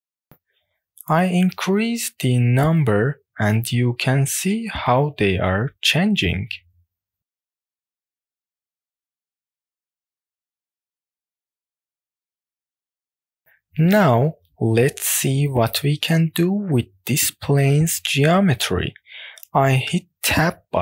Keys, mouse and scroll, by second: 1.6 click, 2.2 click, 2.6 click, 3.2 click, 3.6 click, 4.1 click, 4.6 click, 6.0-6.3 middle drag, 6.6-7.2 scroll up 2, 7.2 middle click, 7.8-8.5 middle drag, 10.1 click, 11.1 click, 11.7 click, 12.2-12.7 scroll down 2, 12.7-13.2 middle drag, 13.4 click, 16.1 Tab, 17.2 scroll down 1, 17.6 shift+middle click, 17.9 click, 18.5-19.8 middle drag, 19.8-20.6 scroll down 1, 20.6 click.